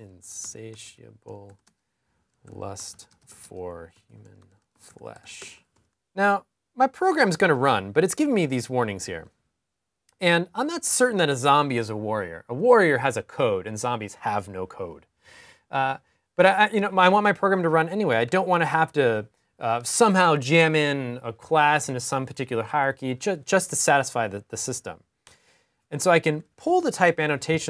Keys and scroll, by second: 0.0-3.7 typing, 26.0 super+s.